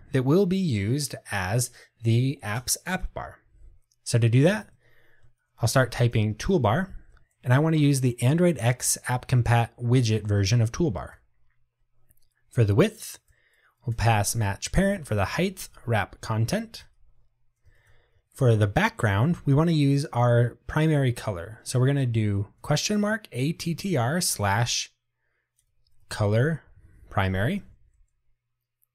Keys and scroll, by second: 11.3 Return, 16.9 Tab, 26.9 Tab.